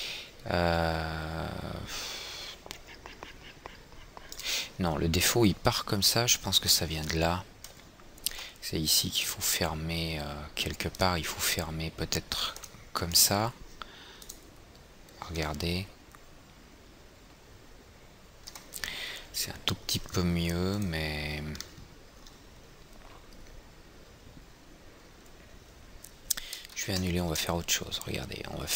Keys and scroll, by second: 27.2 ctrl+z, 27.8 ctrl+z.